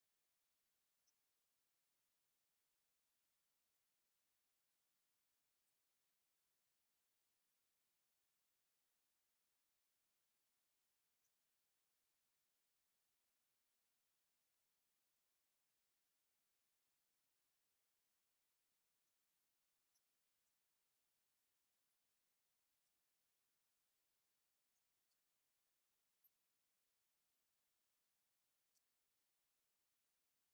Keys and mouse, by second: 1.7 click, 2.6 click, 3.4 click, 4.7-5.7 drag, 6.2-12.1 drag, 28.4 click, 28.8-30.2 drag.